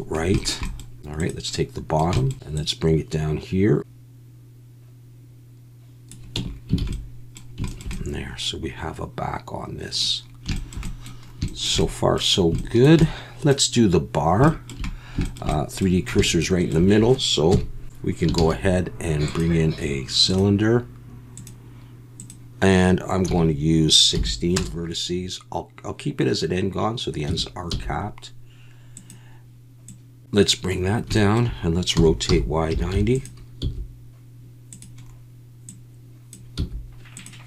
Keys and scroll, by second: 6.3 Tab, 6.8 alt+a, 17.5 KP_1, 18.4 shift+a, 27.3 Tab, 27.7 s, 31.9-33.6 typing, 36.6 s.